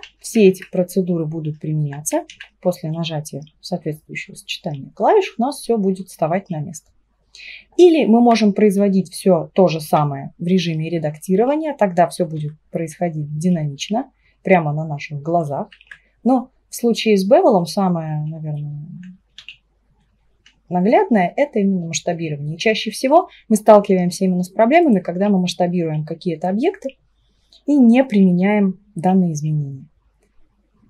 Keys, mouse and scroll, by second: 0.1 ctrl+z, 0.4 ctrl+z, 2.3 ctrl+a, 8.4 Tab, 11.9 right click, 12.4 r, 15.7 ctrl+z, 19.4-22.4 right drag, 19.4 s, 25.6 right click, 26.4 Tab, 27.4-29.5 right drag.